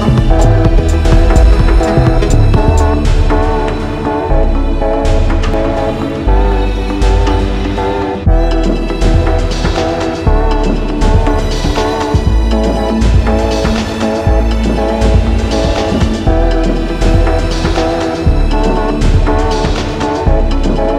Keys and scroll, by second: 14.9 ctrl+i.